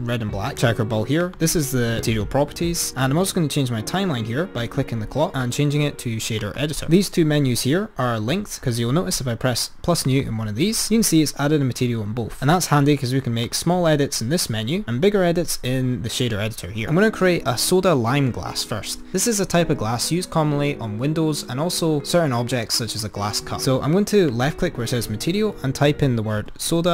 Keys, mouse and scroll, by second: 1.2 click, 4.8-8.7 drag, 10.2-12.5 drag, 13.6-16.1 drag, 24.2-26.9 drag.